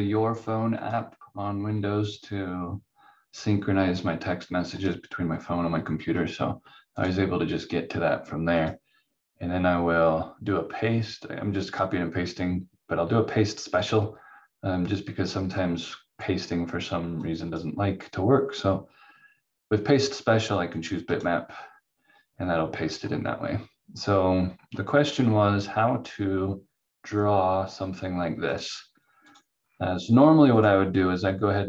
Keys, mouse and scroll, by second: 4.7 click, 13.8 click, 17.2 click, 21.1 click, 22.6-24.0 scroll down 1, 25.2 scroll up 1, 28.5 click, 29.5-30.0 scroll down 1, 30.6 click.